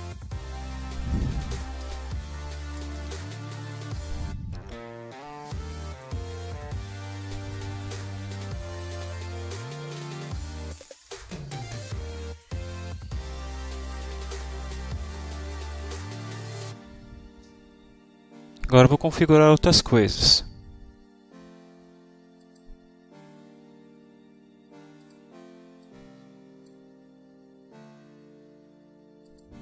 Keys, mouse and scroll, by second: 0.6 click, 1.4-3.6 typing, 5.7-8.3 drag, 21.5 click, 22.4 click, 22.7 click, 23.9 click, 24.7 click, 25.3 click, 25.6 click, 27.1 click, 28.1 click, 28.5 click, 29.3 click.